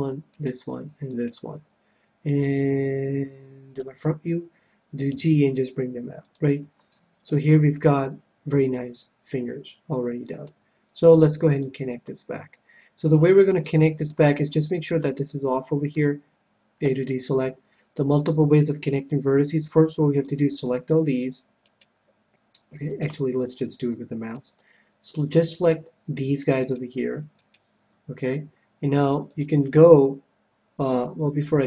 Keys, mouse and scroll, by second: 3.7 KP_1, 5.1 g, 6.3-7.8 drag, 7.4-9.0 middle drag, 11.5-13.2 drag, 13.0-16.8 middle drag, 16.8 a, 18.3 a, 19.5 c, 21.6-24.6 right drag, 23.4-26.2 middle drag, 27.4-29.1 right drag, 29.2-30.9 drag.